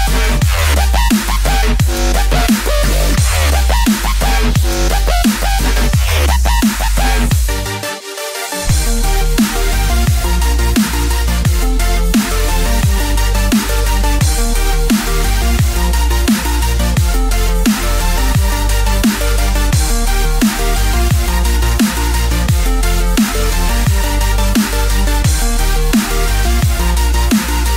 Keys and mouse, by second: 0.3 shift+click, 0.6 shift+click, 1.2 shift+click, 1.8 shift+click, 2.8 middle click, 3.9 shift+click, 4.5 shift+click, 4.9 shift+click, 5.4 shift+click, 6.2 shift+click, 6.6 shift+click, 7.3 shift+click, 7.8 shift+click, 8.2 shift+click, 8.7 shift+click, 9.2 shift+click, 9.6 shift+click, 10.2 shift+click, 10.7 shift+click, 11.2 shift+click, 12.1 shift+click, 12.5 shift+click, 13.1 shift+click, 13.6 middle click, 14.8 shift+click, 15.5 middle click, 17.0 e, 22.8-24.2 middle drag, 25.2 Tab, 26.2-27.7 middle drag.